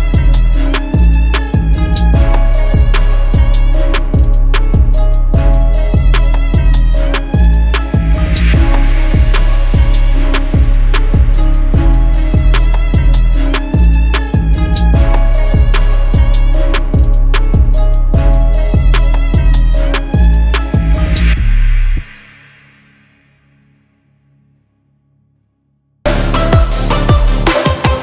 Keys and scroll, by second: 2.9 shift+Page_Down, 3.1 ctrl+Page_Up, 6.8 F3, 8.3 shift+F2, 8.6 Escape, 10.4 shift+F2, 12.4 shift+F2, 12.7 F4, 13.8 shift+F2, 14.0 Escape, 16.9 ctrl+r, 17.3 F3, 17.6 Escape, 18.4 ctrl+r, 19.3 ctrl+g, 20.4 F3, 25.0 c, 25.5 shift+F2, 25.6 Escape.